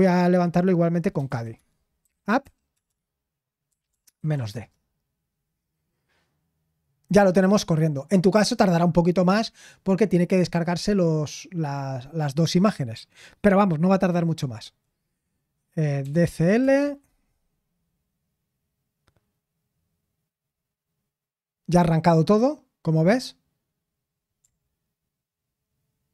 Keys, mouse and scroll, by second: 1.1-4.8 typing, 16.0-17.1 typing.